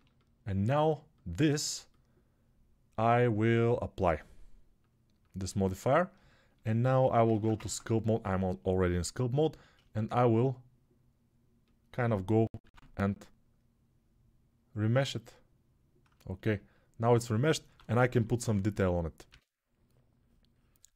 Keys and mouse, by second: 4.2 middle click, 4.7-20.9 drag, 7.4 ctrl+Tab, 9.1 shift+r, 15.3 ctrl+r, 17.4 1, 19.0 x.